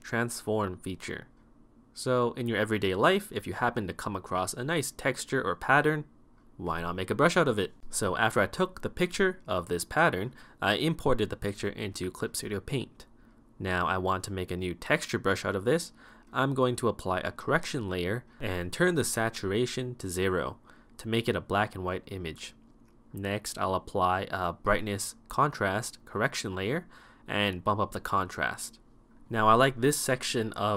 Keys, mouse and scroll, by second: 0.0-5.2 typing, 0.1 right click, 0.4 right click, 0.7 right click, 1.0 right click, 2.1 right click, 2.6 ctrl+-, 2.7 right click, 3.0 right click, 3.5 right click, 3.8 right click, 4.0 right click, 4.1 ctrl+-, 4.2 right click.